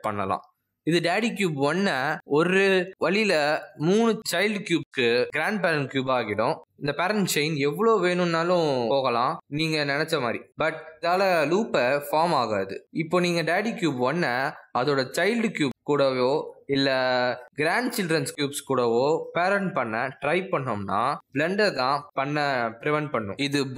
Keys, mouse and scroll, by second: 1.1 click, 1.6 g, 4.3 r, 6.6 click, 6.9 r, 7.8 g, 8.2 r, 8.8 click, 9.3 click, 9.5 r, 10.9 click, 11.0 g, 12.0 click, 12.1 g, 13.0 r, 14.2 click, 14.7 click, 15.0 g, 15.8 click, 16.0 g, 16.8 click, 16.8 g, 17.9 click, 18.1 g, 18.8 middle click, 19.9 click, 20.1 g, 20.8 click, 22.1 shift+click, 22.8 right click.